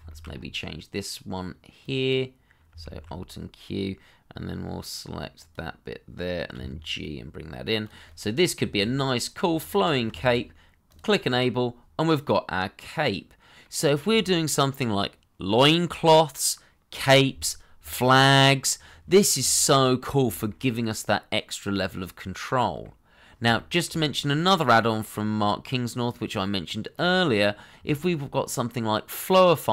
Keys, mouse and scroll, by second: 0.0 shift+middle click, 0.2-1.5 scroll up 1, 2.8 alt+q, 7.5 g, 8.0 middle click, 8.9-9.2 scroll down 1, 9.2 middle click, 9.6 Tab, 10.1 shift+middle click, 11.2 scroll down 1, 11.5 middle click, 13.7-15.5 scroll up 1, 19.1 scroll down 1, 19.4 shift+middle click, 19.9 scroll up 1, 20.3 shift+middle click, 20.6 middle click, 23.1 scroll up 1, 23.5 shift+middle click, 24.9 middle click, 27.4-27.7 scroll up 1, 27.9 shift+middle click.